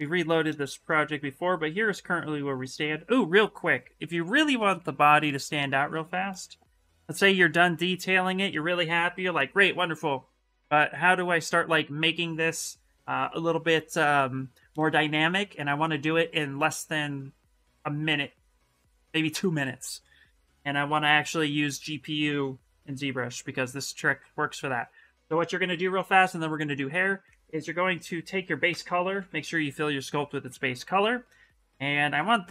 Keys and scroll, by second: 3.9 shift+f, 4.3 shift+f, 27.6-29.4 typing.